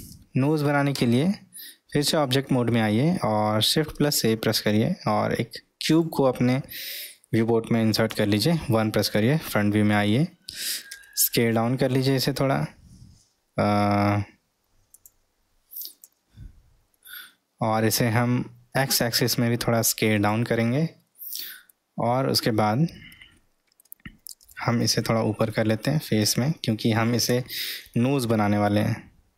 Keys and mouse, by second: 1.0 Tab, 2.2-2.8 middle drag, 10.9 s, 17.8 s, 23.4 middle click, 24.5 g, 28.7 s.